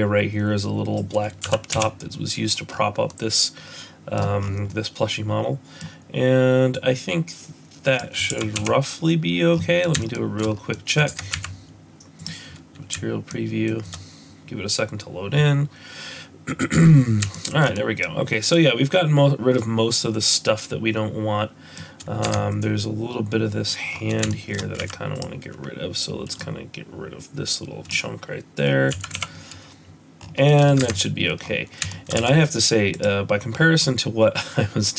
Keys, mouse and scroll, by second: 1.4 x, 2.6-3.0 scroll up 5, 3.0 middle click, 4.4 scroll down 3, 4.6 middle click, 6.7 click, 8.3 x, 9.5 scroll down 5, 9.8 middle click, 10.1 shift+middle click, 10.4 scroll up 2, 10.7 middle click, 11.3 Tab, 11.3 z, 16.6 shift+middle click, 17.3 shift+middle click, 17.7 middle click, 22.8 Tab, 23.9 scroll up 2, 24.2 shift+middle click, 24.7 z, 26.3 click, 28.9 x, 30.2 scroll down 5, 30.4 middle click, 31.0 Tab, 31.3-31.8 scroll up 4, 31.8 shift+middle click, 32.1 z, 33.5 scroll down 2, 33.8 middle click.